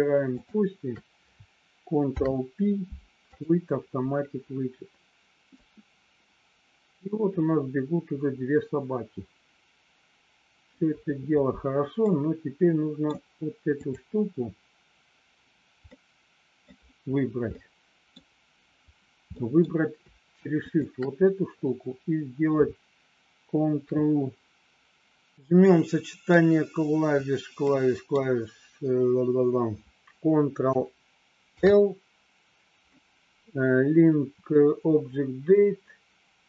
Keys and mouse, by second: 0.3 shift+click, 1.9 ctrl+p, 5.5-10.8 drag, 12.1 middle click, 15.9 middle click, 17.4 middle click, 19.3 middle click, 20.7 shift+click, 25.3-26.5 middle drag, 27.7 middle click, 31.6 ctrl+l.